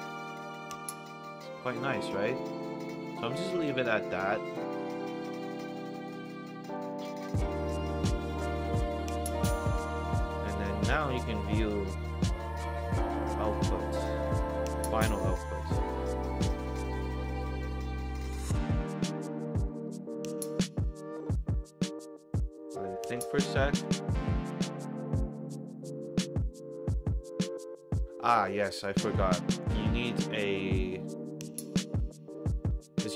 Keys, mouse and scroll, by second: 4.3 middle click, 7.4 middle drag, 8.1 scroll up 2, 8.6 click, 9.3 middle drag, 10.3 click, 12.5 middle drag, 13.5 click, 14.8 1, 27.9-28.3 middle drag, 28.6 middle drag, 29.2 middle drag, 30.0 click, 30.5 middle drag, 31.3 click, 32.1 middle drag, 32.6 click.